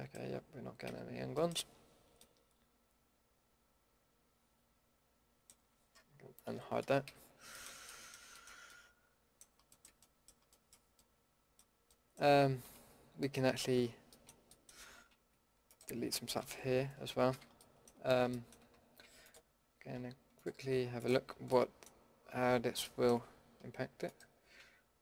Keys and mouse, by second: 0.8 a, 6.5 alt+h, 7.0 a, 10.5-11.1 middle drag, 11.9-13.8 middle drag, 14.6-16.4 middle drag, 16.4 KP_Decimal, 17.3 a, 21.2-23.1 middle drag, 23.2-24.1 middle drag, 24.1-25.0 drag.